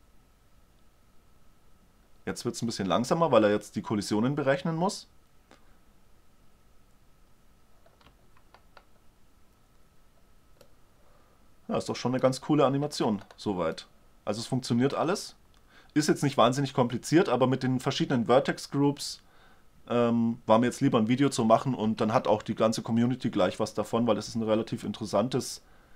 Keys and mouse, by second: 8.9-16.1 middle drag, 22.4 alt+a, 25.3-25.9 middle drag.